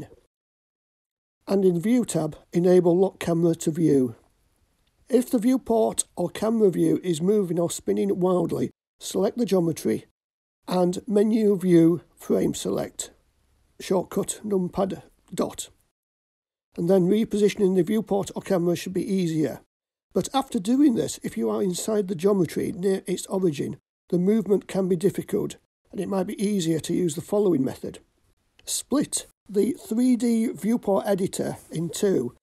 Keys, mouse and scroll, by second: 4.3 click, 4.4-7.9 shift+middle drag, 9.3 click, 10.9 KP_Decimal, 12.5 middle click, 13.7-14.6 shift+middle drag, 14.9-28.3 middle drag, 28.4-30.3 drag, 31.7 click.